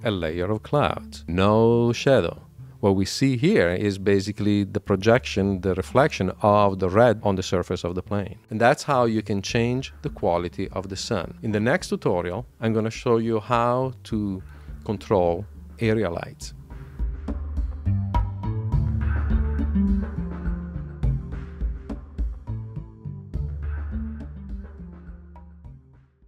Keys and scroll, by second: 15.5 super+q.